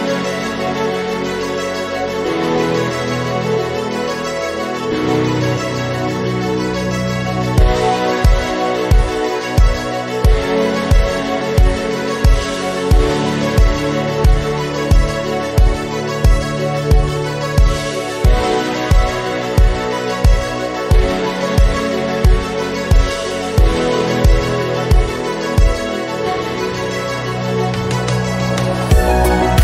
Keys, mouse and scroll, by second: 3.0-3.7 scroll up 2, 3.7 click, 4.3 g, 13.3 scroll down 3, 13.6 middle click, 13.9 click, 14.3 KP_7, 14.7 g, 19.6 click, 20.2 KP_0, 20.5-21.4 scroll up 3, 21.4 t, 21.9 click, 22.4 click.